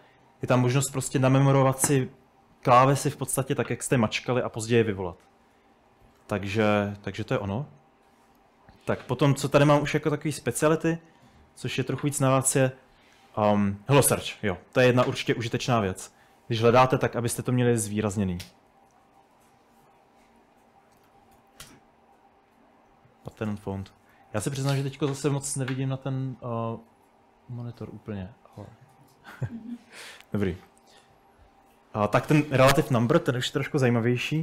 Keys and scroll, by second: 11.5 k, 16.6-18.7 typing, 19.9 /, 20.9-21.6 typing, 23.1-27.0 typing, 29.9-31.5 typing.